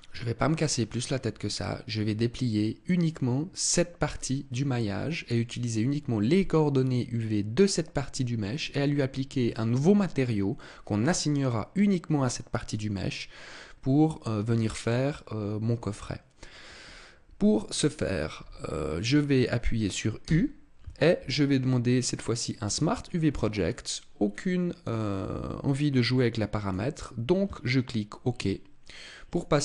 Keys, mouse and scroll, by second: 0.2 scroll down 1, 20.1 u, 29.2 click.